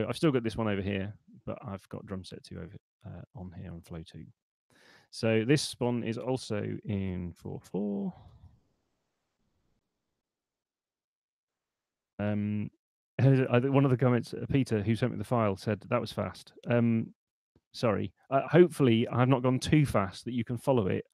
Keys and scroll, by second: 6.8-8.5 typing, 8.8 Return.